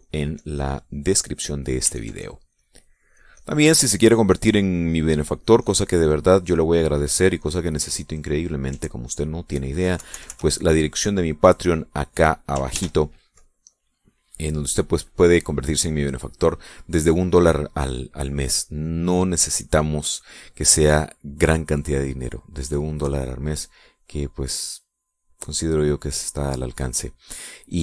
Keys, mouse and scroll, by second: 2.1 middle click, 2.7-6.8 ctrl+drag, 6.9 ctrl+middle click, 7.3 ctrl+middle click, 7.7 ctrl+middle click, 8.1 ctrl+middle click, 8.9-10.3 ctrl+drag, 10.7 KP_Subtract, 11.4-13.3 drag, 13.4 ctrl+s, 16.3-17.4 drag.